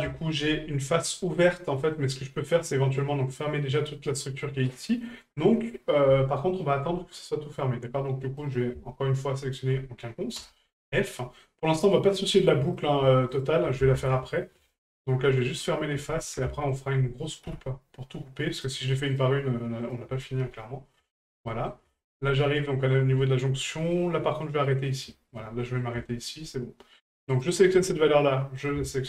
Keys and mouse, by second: 0.1 shift+middle drag, 1.7 middle click, 6.5 shift+middle drag, 8.4 right click, 9.5 shift+right click, 10.9 shift+middle click, 12.7 right click, 13.3 shift+right click, 14.9 shift+right click, 15.6 shift+right click, 16.7 shift+right click, 18.5 right click, 19.1 shift+right click, 19.8 shift+right click, 21.1 shift+middle drag, 21.5 middle drag, 22.0 shift+middle click, 22.7 middle drag, 23.2 shift+middle drag, 23.7 middle drag, 24.6 middle drag, 25.1 shift+middle drag, 25.6 middle drag, 26.0 shift+middle drag, 27.3 right click, 28.6-29.0 ctrl+drag.